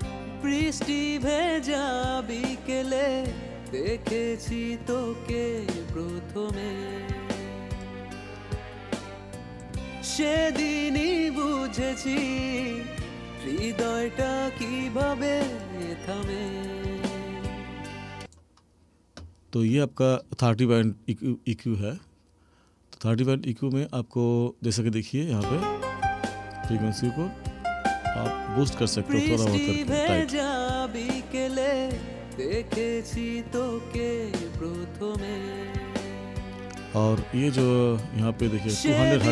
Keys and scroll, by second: 25.3 space.